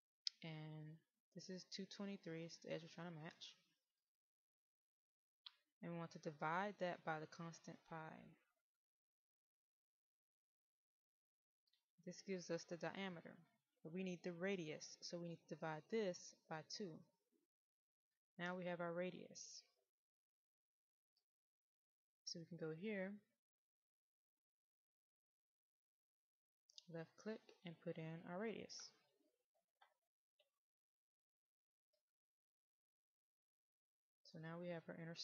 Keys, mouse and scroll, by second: 20.4 click.